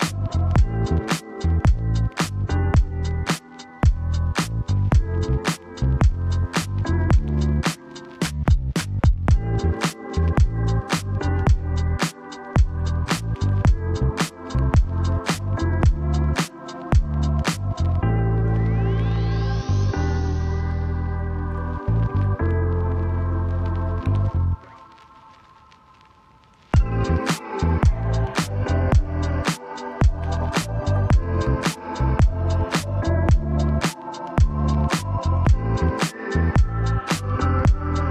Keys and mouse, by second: 0.5 click, 1.5 click, 2.5 middle click, 3.2 Tab, 4.2 middle click, 5.3 shift+middle click, 5.7 middle click, 6.2 middle click, 6.8 middle click, 8.2 a, 9.5 shift+n, 10.9 ctrl+z, 12.5-19.0 drag, 21.3 ctrl+alt+n, 22.6 alt+n, 25.1 middle click, 25.5 Tab, 25.8-27.4 middle drag, 27.9 shift+middle click, 28.5 middle click, 29.6 click, 31.6 3, 33.1 c, 35.6 click, 36.4 click, 37.3 click.